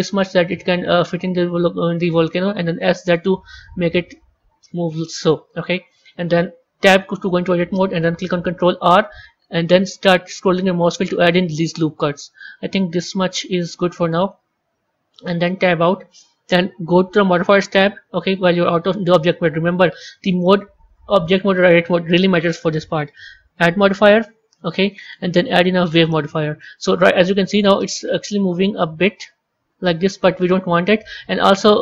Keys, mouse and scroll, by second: 2.6 s, 6.8 Tab, 8.6 ctrl+r, 15.5 Tab, 17.2 click, 20.7-26.4 drag, 28.9-31.8 drag.